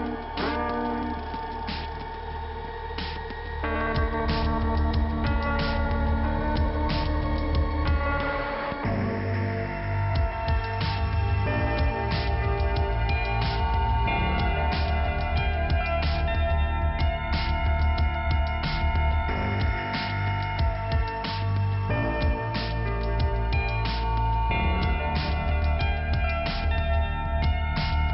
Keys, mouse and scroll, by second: 0.4 click, 1.8 click, 5.8 click, 10.6 click, 11.6 click, 12.7 click, 15.1 click, 20.3 click, 20.4 click, 21.1 click, 22.4 click, 23.8-24.2 scroll up 2, 24.2 middle click, 25.1 click, 26.7 click.